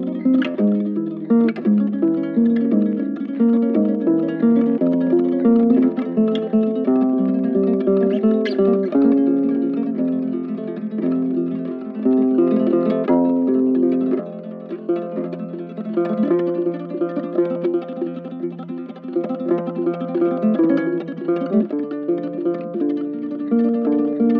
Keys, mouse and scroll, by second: 7.3 right click, 12.5 right click, 14.1 shift+click, 15.7 right click, 17.5 shift+click, 18.2 shift+click, 20.2 shift+click, 20.7 shift+click, 22.0 double click, 22.5 shift+click.